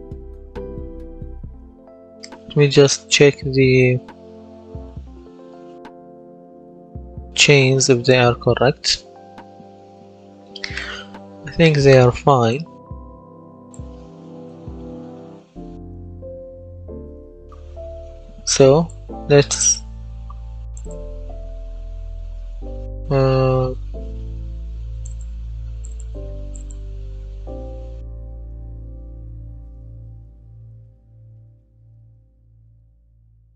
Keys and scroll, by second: 0.2 d, 1.0 s, 14.4-18.0 typing, 28.7 w, 30.6 s, 31.2 w, 31.8 s.